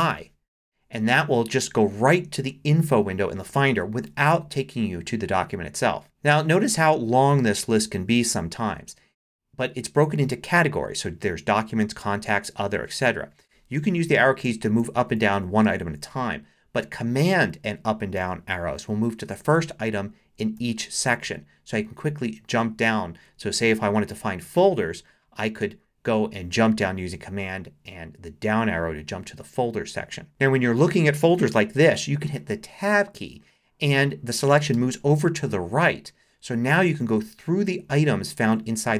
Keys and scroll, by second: 13.9 Up, 14.8 Down, 15.6 Up, 16.8 super+Up, 18.2 super+Down, 19.5 super+Down, 29.4 Down, 34.7 Tab, 36.7 Down, 38.5 Up.